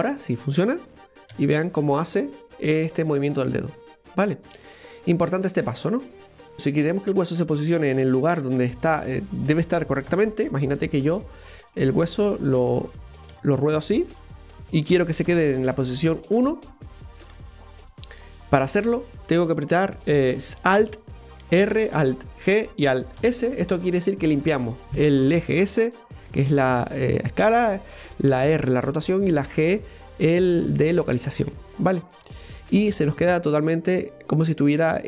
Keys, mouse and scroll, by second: 0.1 right click, 1.3 r, 6.6 KP_1, 8.0 KP_1, 8.4 KP_3, 10.1 KP_0, 11.4 scroll down 2, 11.8-13.3 middle drag, 13.3 r, 14.2-15.3 middle drag, 15.3 KP_0, 16.3-17.0 scroll up 1, 17.0 scroll up 1, 17.2 KP_1, 21.6 alt+r, 22.4 alt+g, 23.2 alt+s, 31.6 scroll down 2, 32.1-35.0 middle drag.